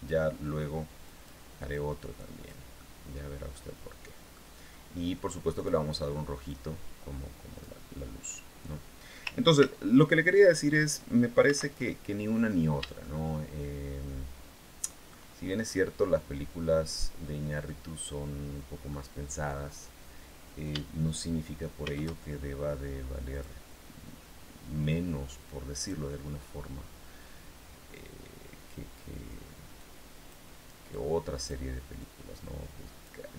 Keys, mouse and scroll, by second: 0.8 click, 1.5 click, 2.6-4.2 middle drag, 5.4 click, 6.2-7.6 drag, 9.4 ctrl+c, 11.2 ctrl+v, 12.0-12.4 scroll down 2, 12.8-14.7 shift+middle drag, 16.6 scroll down 2, 17.4-18.8 drag, 21.6 shift+a, 23.1 click, 25.6 click, 27.8-28.6 scroll down 4, 29.6 click, 30.7 click, 31.8-33.0 drag, 33.1 middle click.